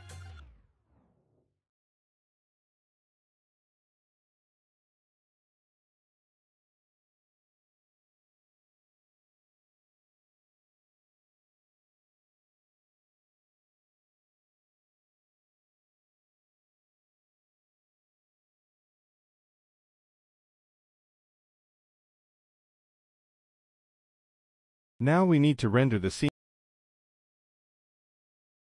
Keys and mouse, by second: 2.6 KP_0, 6.3 click, 7.1-7.6 middle drag, 11.3 middle click, 12.3 click, 14.2 middle click, 14.8 middle click, 15.6-18.0 drag, 20.8 middle click, 21.1-22.8 drag, 23.0 middle click, 23.3-24.7 drag, 25.7 z, 27.0-28.6 drag.